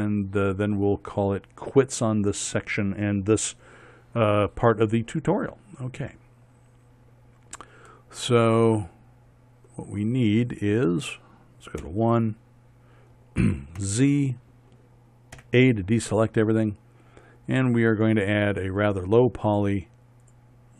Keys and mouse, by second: 6.8-11.1 middle drag, 12.5 KP_1, 14.5 z, 16.1 a.